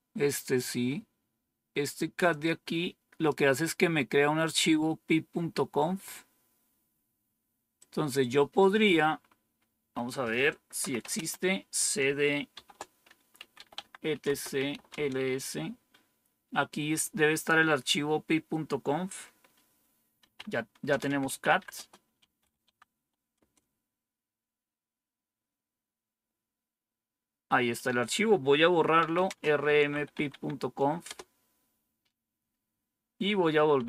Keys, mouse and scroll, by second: 2.2-3.2 drag, 7.7 click, 9.1-10.6 scroll down 1, 10.5-11.4 typing, 12.4-15.1 typing, 19.9-22.8 typing, 23.2 Return, 28.6-30.5 typing, 30.9 Return.